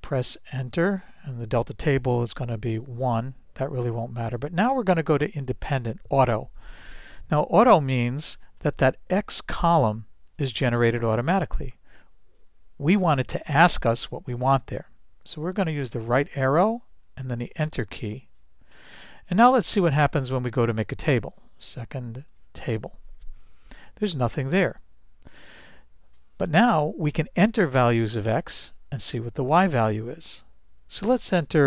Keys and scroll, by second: 0.8 Return, 5.5 Return, 16.0 Right, 17.4 Return.